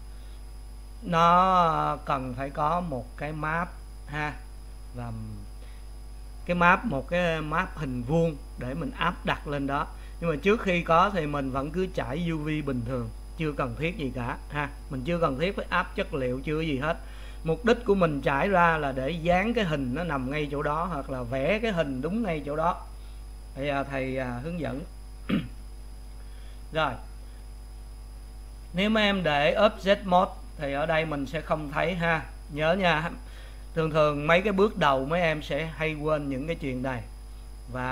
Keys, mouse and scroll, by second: 29.5-37.9 drag.